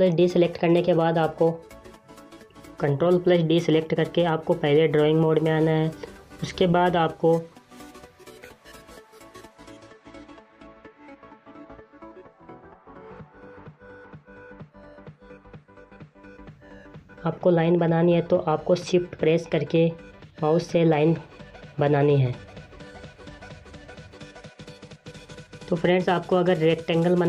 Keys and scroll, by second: 2.0 ctrl+d.